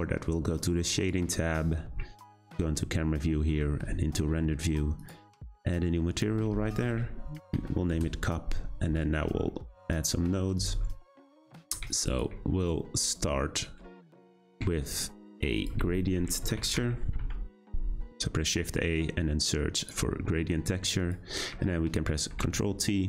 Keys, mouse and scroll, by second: 1.2 click, 2.6 `, 3.0 z, 5.0-9.1 drag, 9.1-10.5 scroll down 4, 10.5-19.8 drag, 22.3 ctrl+t.